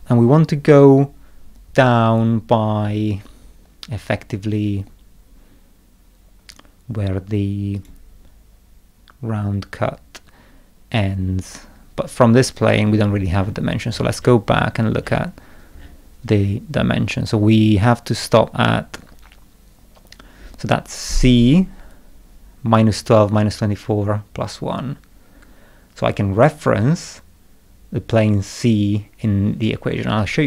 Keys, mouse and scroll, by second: 7.7 click, 10.7 middle click, 11.0 middle click, 12.8 middle click, 13.4 scroll up 1, 13.9-14.7 scroll up 3, 15.0 scroll up 1, 15.7-16.0 scroll up 1.